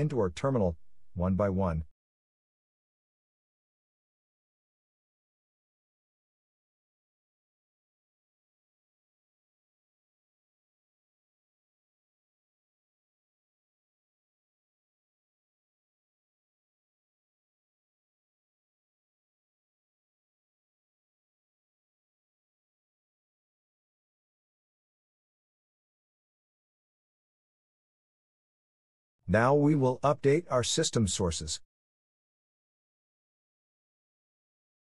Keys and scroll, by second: 13.8 Return, 28.5 Return.